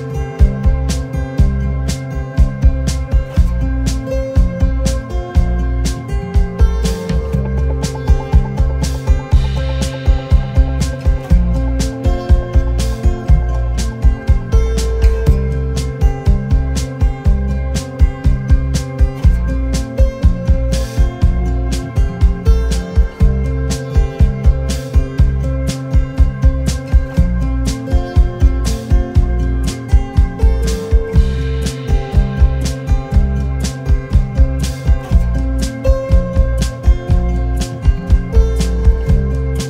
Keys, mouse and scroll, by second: 0.4 Down, 1.0 Down, 2.1-2.4 alt+scroll down 1, 2.4 alt+scroll up 1, 2.7 space, 4.9 double click, 6.5 right click, 8.9 alt+click, 12.6 double click, 13.5-14.1 alt+scroll down 1, 16.4 v, 16.9 double click, 17.5 alt+scroll up 1, 18.1 space, 18.7 alt+scroll up 1, 19.4 double click, 19.6 alt+scroll down 1, 21.5-22.0 alt+scroll down 1, 24.6 double click, 30.2-30.6 alt+scroll up 1, 31.7 alt+scroll up 1, 31.8 alt+scroll down 1, 35.4 double click, 37.8 shift+click.